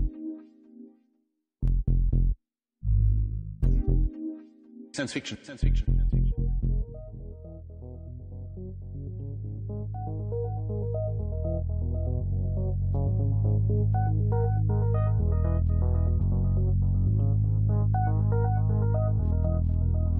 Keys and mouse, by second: 1.5 shift+d, 4.5-7.7 drag, 8.8 click, 10.2 click, 12.9 shift+d, 14.7-16.8 drag, 19.9-20.1 drag.